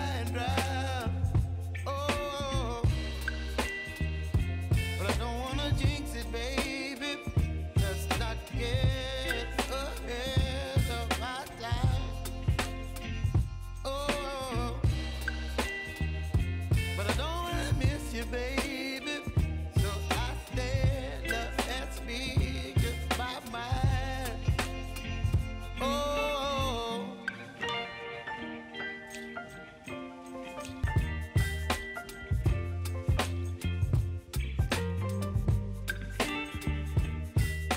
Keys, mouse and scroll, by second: 0.2 right click, 1.1 click, 3.4 typing, 4.6-6.0 drag, 6.0 space, 10.0 space, 10.6 click, 10.8 space, 12.2 r, 13.2-14.8 drag, 14.8-17.4 alt+drag, 17.7 space, 20.1 space, 20.9 click, 21.6 space, 22.8 click, 23.1 space, 25.5 [, 25.9 space, 27.9 space, 28.7-30.0 drag, 33.1 t, 33.8-37.3 drag, 37.3 space.